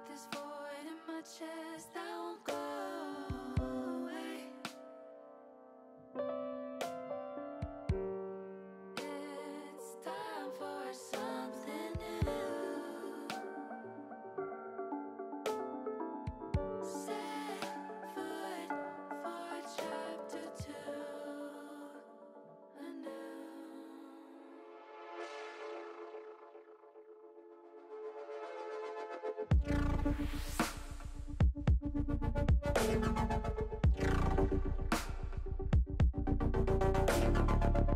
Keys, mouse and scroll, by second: 0.8 click, 4.8 click, 9.1 click, 9.3-12.7 drag, 13.6 click, 15.2 l, 16.1 click, 17.5 click, 18.3 click, 20.1 click, 21.5-27.2 drag, 23.1 e, 24.1 BackSpace, 24.2 BackSpace, 24.9 e, 28.4 click, 33.3 click, 34.5 click, 35.4 click.